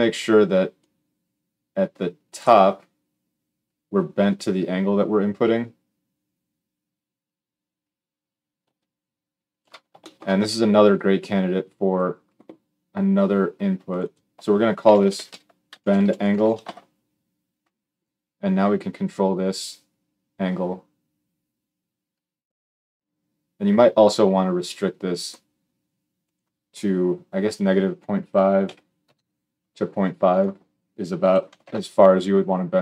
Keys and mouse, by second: 0.5-32.8 drag.